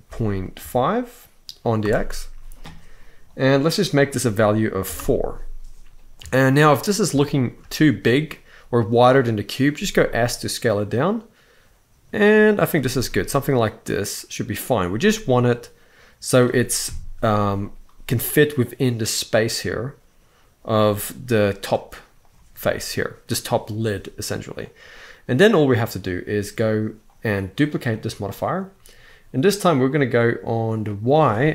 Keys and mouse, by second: 3.7 click, 6.0 shift+middle drag, 6.9-7.2 shift+middle drag, 9.5 s, 12.4 click, 12.6 g, 14.8-16.1 middle drag, 16.6 KP_1, 20.9 g, 24.8-25.5 middle drag, 26.8-27.7 drag, 30.6-31.5 drag.